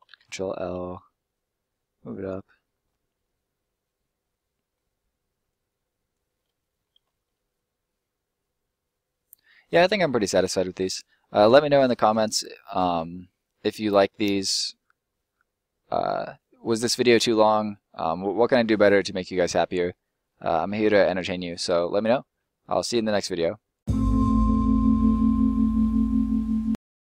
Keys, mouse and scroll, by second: 0.0 ctrl+l, 0.7 s, 2.1 click, 2.5 middle click, 2.8-3.2 scroll up 1, 3.2 middle click, 5.4 click, 6.3 middle click, 7.1 scroll down 1, 7.2 middle click, 10.6 middle click, 13.2 middle click, 14.1 scroll down 1, 14.3 middle click, 17.3-17.7 scroll up 1, 17.7 middle click, 19.8 middle click.